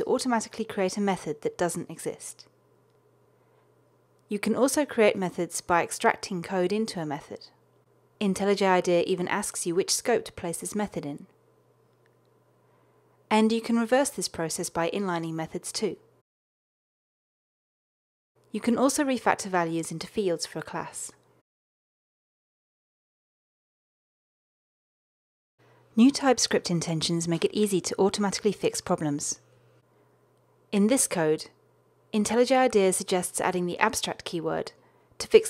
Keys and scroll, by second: 5.4 alt+super+m, 17.4 alt+super+n, 21.5 ctrl+alt+shift+Left, 33.2 alt+Return.